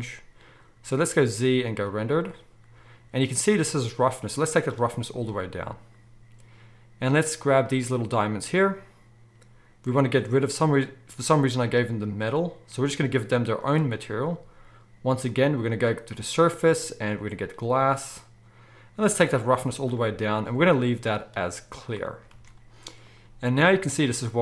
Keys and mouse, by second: 1.1 z, 4.1-7.7 drag, 7.7-11.9 middle drag, 11.9-24.4 drag, 22.3 alt+a.